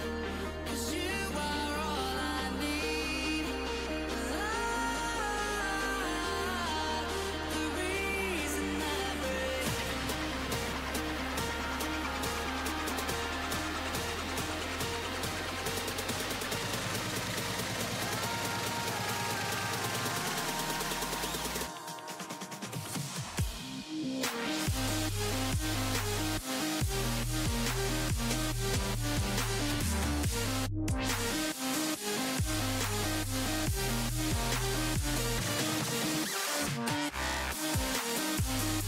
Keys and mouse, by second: 0.9-5.8 drag, 5.8 right click, 10.0-14.0 drag, 14.0 right click, 14.1-16.3 drag, 24.7-34.7 drag.